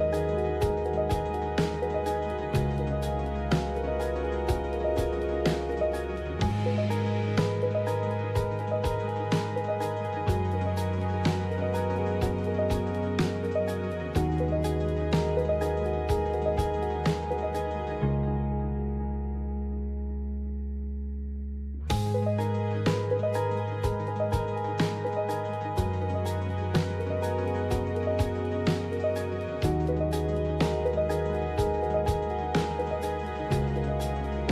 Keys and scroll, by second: 4.6 ctrl+c, 5.3 alt+Tab, 11.2 Right, 19.6 typing, 23.9-24.6 typing, 26.2-29.1 typing, 30.6 typing, 32.7 typing, 33.1 Tab.